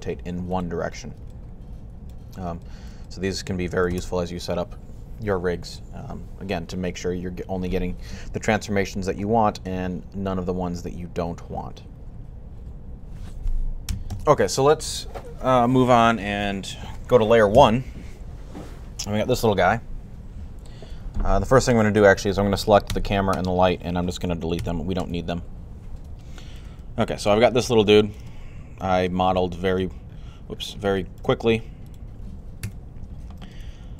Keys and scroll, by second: 5.9 typing, 17.4 1, 24.4 x.